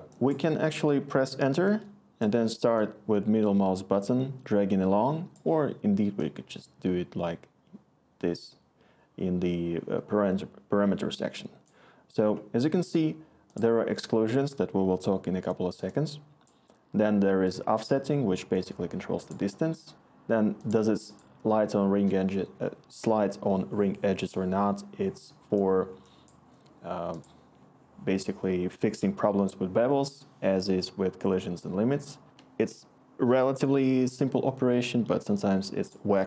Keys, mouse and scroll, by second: 1.6 Return.